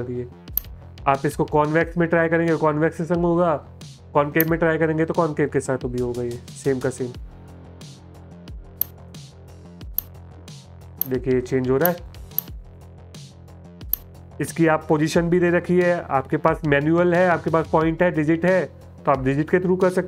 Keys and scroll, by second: 8.9 space.